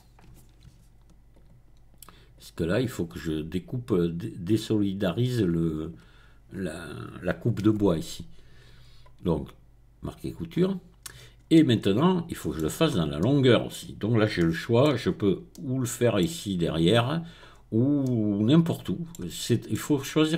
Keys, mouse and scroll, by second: 1.3 alt+shift+click, 2.3 alt+shift+click, 4.5 alt+shift+click, 4.8 alt+shift+middle click, 8.0 right click, 10.0 click, 10.5-11.3 scroll down 1, 11.3 scroll down 1, 11.5-14.3 middle drag, 14.3 shift+middle click, 15.0-15.5 scroll up 2, 16.2-17.1 scroll down 2, 17.5-18.0 scroll up 2.